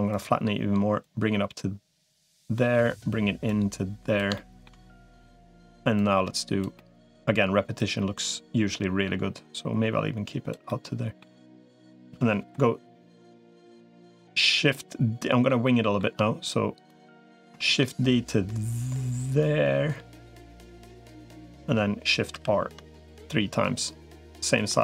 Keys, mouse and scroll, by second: 1.0-2.2 drag, 2.4 middle click, 3.4 click, 4.1 shift+middle click, 5.0 middle click, 5.8 click, 6.5 middle click, 7.6-10.4 drag, 10.5 middle click, 14.4 middle click, 15.4 shift+middle click, 16.6 click, 17.6 shift+d, 22.2 shift+r, 23.0 click, 23.3 middle click, 24.5-24.8 middle drag.